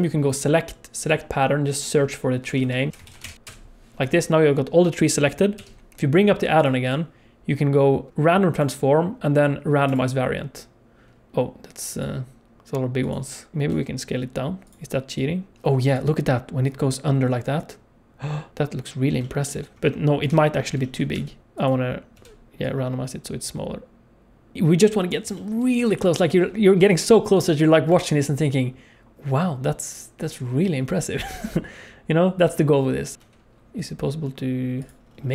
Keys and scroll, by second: 2.6 Left, 2.9 e, 2.9 BackSpace, 3.3 e, 5.5 n, 13.7 s, 20.2 KP_7, 21.1 n, 22.1 n, 26.8 s, 33.2 r.